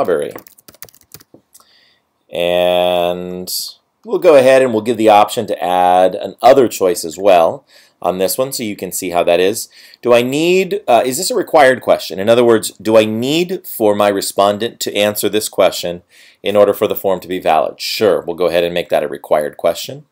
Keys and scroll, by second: 0.0 BackSpace, 0.2 BackSpace.